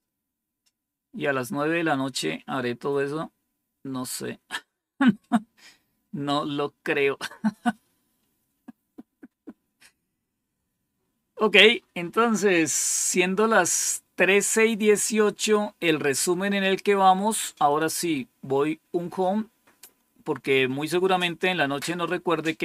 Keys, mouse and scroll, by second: 0.9 scroll down 2, 1.8 scroll down 2, 2.4 scroll down 2, 3.0 scroll down 2, 3.8 scroll down 2, 7.7-8.3 scroll down 5, 9.1 scroll down 2, 9.7 scroll up 2, 11.2-11.7 scroll up 3, 15.8-16.3 scroll up 3, 17.6 click.